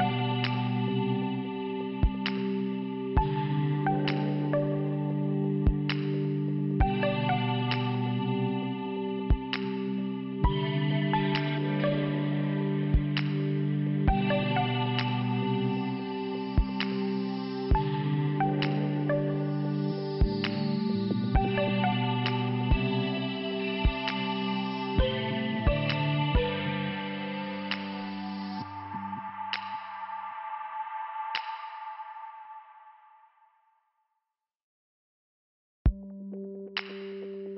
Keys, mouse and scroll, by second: 3.6 click, 4.0 click, 4.4 click, 4.6 double click, 5.0 double click, 6.4 middle click, 7.6 click, 9.1 click, 9.2 click, 9.8 click, 10.6 click, 11.7 click, 17.5 shift+Return, 18.3 click, 20.1 click, 21.2 scroll up 1, 21.6 scroll down 1, 22.2 scroll up 1, 23.7 click, 25.9 click, 27.3 click, 27.7 click, 27.8 double click, 28.4 double click, 29.4 click, 31.2 click, 31.3 click, 32.3 click, 33.3 click, 33.5 click, 34.2 click, 35.5 click, 36.6 click.